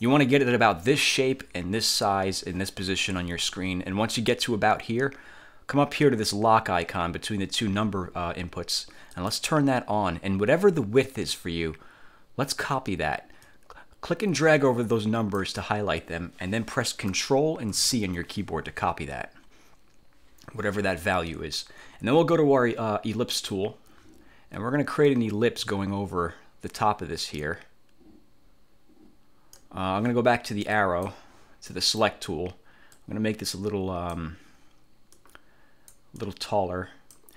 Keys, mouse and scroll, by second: 9.3 click, 13.5-15.7 drag, 17.8 ctrl+c, 23.4 click, 25.1-29.9 drag, 30.9 click, 31.8 middle click, 33.1-34.5 drag, 35.3-36.3 drag.